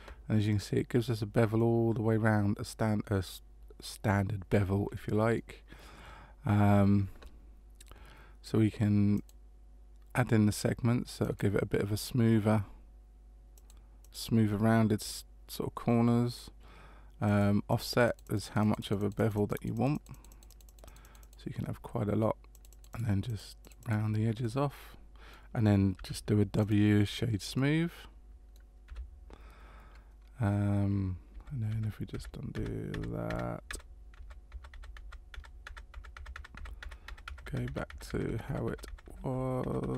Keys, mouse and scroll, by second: 1.6 middle click, 9.1 click, 11.2 click, 13.5 click, 14.0 click, 17.2-18.0 click, 17.7 click, 17.9 click, 18.2 click, 18.4 click, 18.6 click, 18.8 click, 19.0 click, 19.1 click, 19.3 click, 19.5 click, 19.7 click, 19.9 click, 20.1 click, 20.3 click, 20.5 click, 20.6-21.2 click, 20.8 click, 21.0 click, 22.5 click, 22.7 click, 22.9 click, 23.2 click, 23.6 click, 23.8 click, 24.4 middle click, 25.9 w, 27.5 middle click, 28.9 w, 31.3 ctrl+z, 31.7 ctrl+z, 32.1 ctrl+z, 32.5 ctrl+z, 32.9 ctrl+z, 33.3 ctrl+z, 33.7 ctrl+z, 34.1 ctrl+z, 34.5 ctrl+z, 34.7 ctrl+z, 35.0 ctrl+z, 35.3 ctrl+z, 35.6 ctrl+z, 35.9 ctrl+z, 36.1 ctrl+z, 36.3 ctrl+z, 36.5 ctrl+z, 36.8 ctrl+z, 37.1 ctrl+z, 37.3 ctrl+z, 37.4 ctrl+z, 37.7 ctrl+z, 37.9 ctrl+z, 38.1 ctrl+z, 38.3 ctrl+z, 38.5 ctrl+z, 38.7 ctrl+z, 38.9 ctrl+z, 39.1 ctrl+z, 39.2 ctrl+z, 39.6 ctrl+z, 39.8 ctrl+z.